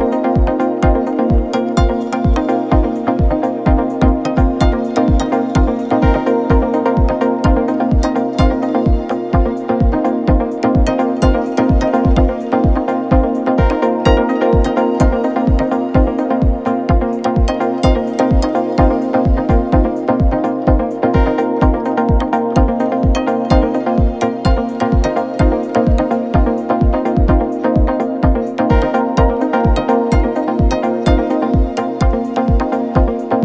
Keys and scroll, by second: 2.0 F4, 5.8 z, 6.7 space, 26.8 space, 30.1 j, 31.3 F4.